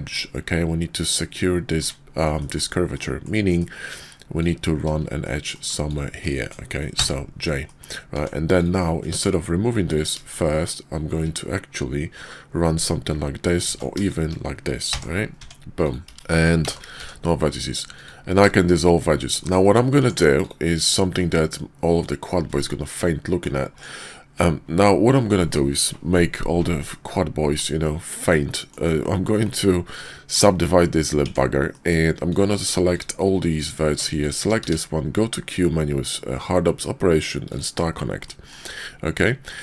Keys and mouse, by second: 0.0 click, 1.7 Tab, 2.3 click, 2.9 click, 3.4 KP_5, 5.1 click, 7.0 j, 7.6 click, 8.1 Tab, 9.1 Tab, 9.8 click, 13.6 ctrl+z, 14.8 j, 15.3 Tab, 15.7 click, 16.0 x, 16.1 z, 16.9 x, 18.5 shift+click, 19.4 shift+click, 20.0 Tab, 21.1-23.4 drag, 26.9-28.3 drag, 28.3-28.7 middle drag, 29.4 click, 31.2 Tab, 31.6 click, 32.1 click, 32.9 click, 33.5 ctrl+click, 34.1 shift+click, 34.6 q, 38.2 click, 39.4 click.